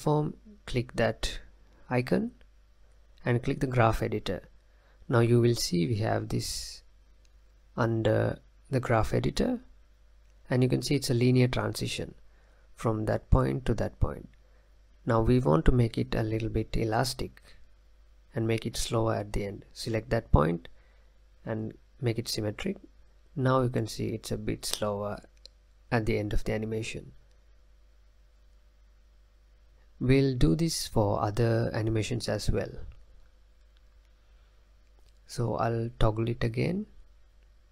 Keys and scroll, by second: 28.0 space, 29.7 space, 30.2 space, 30.9 space.